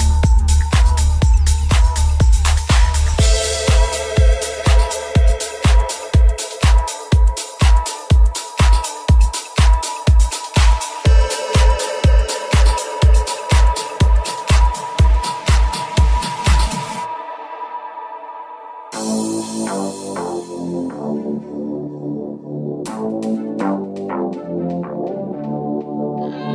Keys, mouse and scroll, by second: 0.1 alt+s, 7.2 right click, 8.9 right click, 9.1 alt+s, 12.2 right click, 12.5 alt+s, 15.3 KP_1, 17.6 alt+s, 20.1 g, 25.2 alt+s.